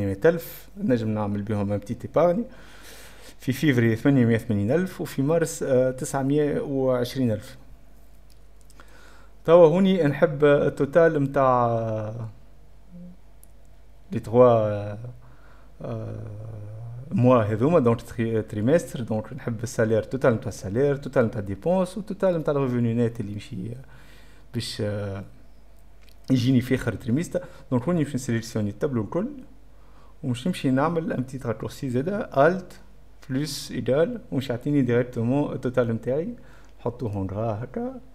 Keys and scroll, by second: 30.2-31.1 typing, 32.7 alt+z, 33.1 alt+F11, 33.2 alt+=, 33.8 =, 33.9 space.